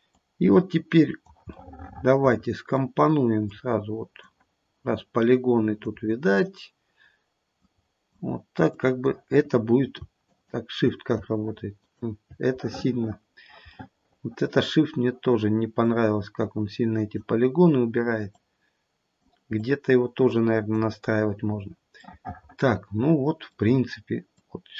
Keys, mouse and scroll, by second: 0.1 click, 1.8 middle click, 3.5 click, 4.9 click, 6.4-7.6 scroll down 1, 7.6 click, 8.6 click, 10.3 shift+click, 11.7 shift+click, 12.6 middle click, 13.8 middle click, 14.3 middle click, 14.8-15.8 scroll down 1, 15.8 click, 18.4 click, 21.0-22.2 scroll down 4, 22.0 middle click, 24.4 click.